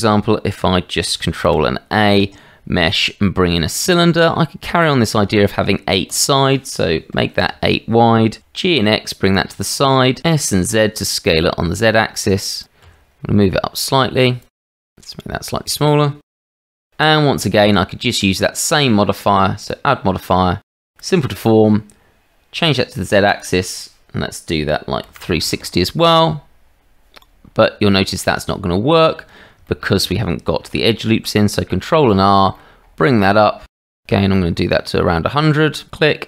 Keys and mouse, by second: 1.3 shift+a, 6.1-8.1 drag, 8.4 g, 9.6-10.0 shift+middle drag, 10.2 s, 12.6 g, 14.7 s, 16.2 g, 17.1 shift+middle click, 17.6-18.7 middle drag, 21.1-22.8 drag, 23.3-26.0 drag, 27.9 shift+middle click, 28.6 Tab, 29.6 shift+middle click, 31.1 ctrl+r.